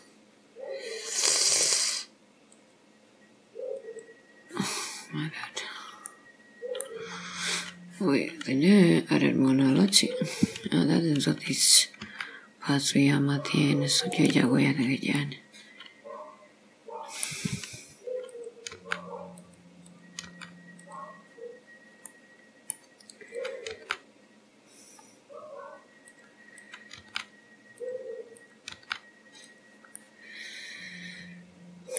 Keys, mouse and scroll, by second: 2.6 click, 5.0-5.4 scroll up 4, 5.6-6.1 scroll down 2, 6.2 middle click, 7.2 scroll up 3, 8.8 click, 10.2-11.5 scroll up 3, 11.5 click, 12.1 g, 15.3 middle click, 18.3 click, 18.9 g, 19.9 click, 20.3 g, 21.3 scroll down 1, 22.2 middle click, 23.4 click, 23.9 g, 26.6 click, 27.1 g, 28.4 click, 28.8 g, 30.0 middle click.